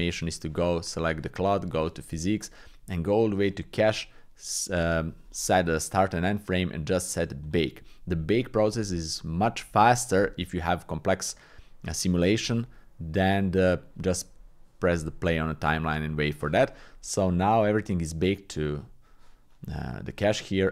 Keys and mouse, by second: 0.7 click, 1.7 click, 3.5 click, 7.4-12.0 drag, 15.2-16.4 drag, 17.5 click, 18.8 click.